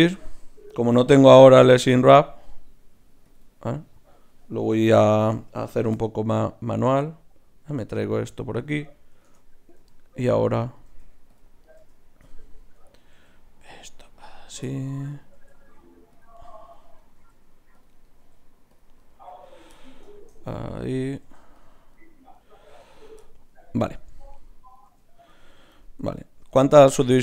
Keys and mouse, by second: 0.1-4.3 drag, 1.1 s, 4.7 s, 8.6-10.3 right drag, 9.2 shift+Tab, 9.7 g, 10.7-11.8 right drag, 10.9 g, 11.8 g, 13.1 g, 15.4 g, 17.2 g, 18.2 g, 19.1 g, 19.7 click, 20.3-22.2 drag, 21.2 g, 22.7 g, 24.9 g.